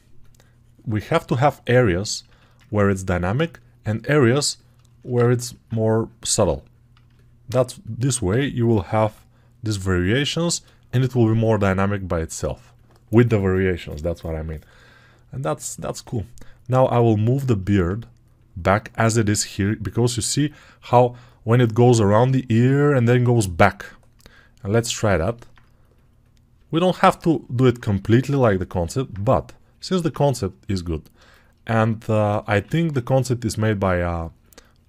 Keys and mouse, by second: 8.2 g, 8.6 ], 8.8 ], 10.5-25.4 ctrl+right drag, 25.4-34.8 drag.